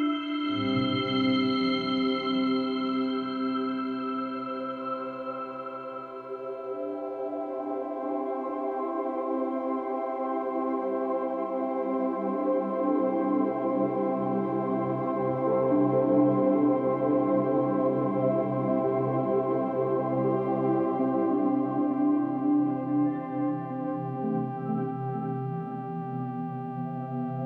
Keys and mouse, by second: 2.0 Right, 3.1 i, 4.0-5.0 drag, 5.7 Right, 5.9 Right, 6.1 Right, 6.3 Right, 6.5 Right, 6.7 Right, 9.2 i, 9.7-10.8 drag, 11.5 click, 13.2 click, 14.0 click, 14.9 shift+click, 15.9 click, 17.1 click, 20.7 shift+s, 21.4 click, 24.5 click.